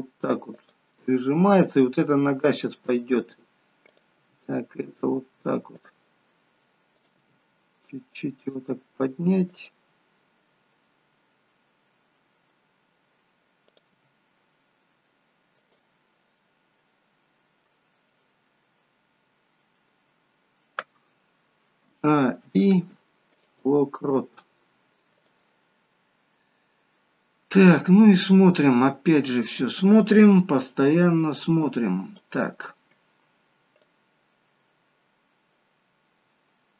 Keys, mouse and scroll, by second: 1.0 middle click, 3.9 middle click, 3.9 click, 4.4 g, 6.9 click, 7.5 g, 10.1-10.5 scroll down 2, 10.5 middle click, 13.7 click, 14.2 g, 16.5 middle click, 21.8 a, 22.5 a, 22.5 i, 25.2 click, 25.8 middle click, 28.2-28.9 scroll down 3, 28.7 middle click, 31.4 click, 34.2 click.